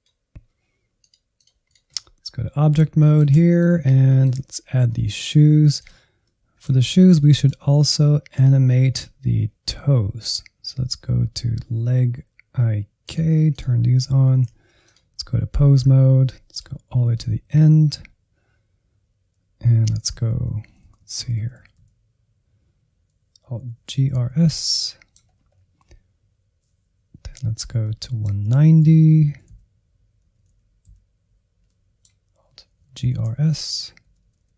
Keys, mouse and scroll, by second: 0.9-2.5 drag, 2.5-3.7 middle drag, 3.7 Insert, 4.0 middle click, 4.4-4.8 scroll up 3, 4.8 shift+middle click, 5.4-5.8 scroll up 1, 5.8 click, 6.2 middle click, 6.8-7.2 scroll up 2, 7.2-8.2 middle drag, 8.2-10.1 drag, 10.1-11.4 scroll down 1, 13.0-14.4 drag, 14.4 ctrl+Tab, 14.8-17.0 drag, 17.0 Up, 17.5-20.2 scroll down 6, 20.2 Right, 20.7 Right, 20.9 Right, 21.0 Right, 21.2 Right, 21.4 Right, 21.6 Right, 21.8 Right, 23.7 alt+g, 24.0 alt+r, 24.2 alt+s, 24.4 scroll up 1, 24.6 middle click, 25.2-26.2 scroll up 4, 27.8 middle click, 28.6-29.4 Right, 29.5 Right, 30.3 Right, 30.5 Right, 30.9 Right, 31.6-32.9 middle drag, 32.9 alt+g, 33.2 alt+r, 33.3 alt+s, 34.0 Left, 34.2 Left, 34.4-34.5 Left.